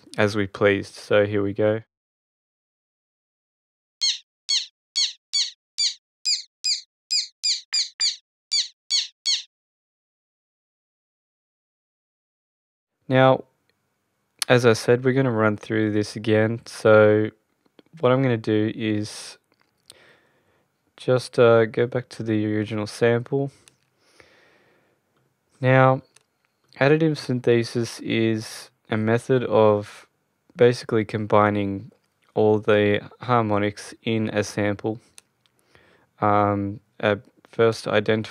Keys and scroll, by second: 3.8 space, 10.4 space, 11.0 Return.